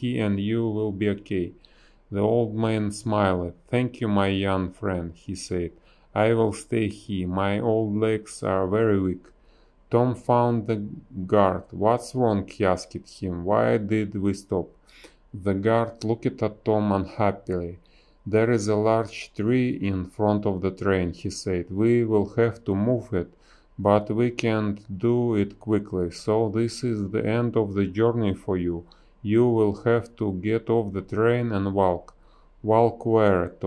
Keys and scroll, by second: 0.0 space, 2.1 space, 3.6 space, 3.7 a, 4.9 space, 7.5 space, 8.1 space, 11.7 space, 12.4 space, 21.8 space, 24.1 space, 24.8 b, 25.0 space, 26.3 space, 28.7 space, 29.0 ctrl+z, 30.7 ctrl+x, 31.1 ctrl+z, 31.3 b, 32.7 ctrl+z.